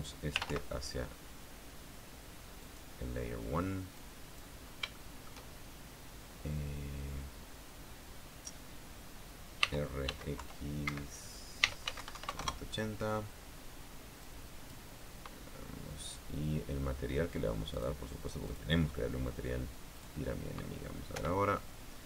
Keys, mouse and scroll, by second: 0.8-1.7 typing, 3.3 click, 4.7 click, 5.5 shift+scroll down 1, 5.6 shift+middle click, 7.3 click, 10.3-13.0 typing, 11.5 Escape, 13.1 KP_Enter, 14.9 click, 18.4 click, 19.1 click, 20.6 click, 21.8 p.